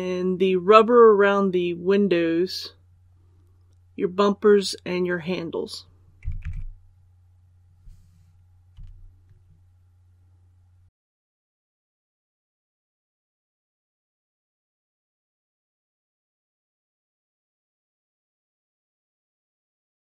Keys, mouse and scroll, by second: 6.3 alt+a, 8.6 i, 11.5 i, 11.6 scroll up 2, 11.9 shift+right click, 12.1 alt+shift+right click, 12.4 ctrl+z, 12.5 alt+shift+right click, 12.7 shift+scroll down 1, 13.2 alt+shift+right click, 13.4 l, 13.7 k, 13.8 right click, 14.1 right click, 14.3 shift+right click, 14.5 middle click, 14.6 scroll up 1, 14.7 scroll down 1, 14.8 shift+right click, 15.0 shift+middle click, 15.2 shift+right click, 15.3 shift+middle click, 15.4 shift+right click, 15.8 middle click, 16.4 middle click, 16.6 shift+right click, 16.8 middle click, 17.2 shift+right click, 17.3 alt+shift+right click, 17.5 ctrl+z, 17.6 alt+shift+right click, 17.8 scroll up 1, 18.0 alt+shift+right click, 18.4 scroll down 1, 18.5 shift+middle click, 19.1 scroll up 1, 19.3 alt+shift+right click, 19.4 scroll down 1, 19.6 shift+right click, 19.7 middle click, 20.0 shift+right click.